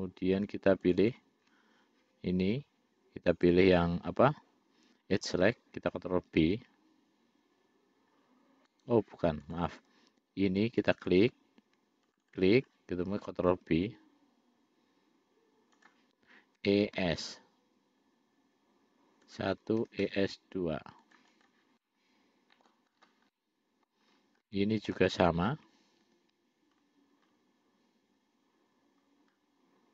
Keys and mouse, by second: 0.0 click, 1.1 shift+click, 1.4 shift+click, 3.6 click, 6.8 ctrl+b, 9.7 click, 11.0 click, 11.3 click, 12.4 shift+click, 12.6 shift+click, 13.8 ctrl+b, 16.9 e, 20.1 e, 21.6 click, 22.1 middle click, 23.6 middle click, 24.7 middle click, 26.3 ctrl+r.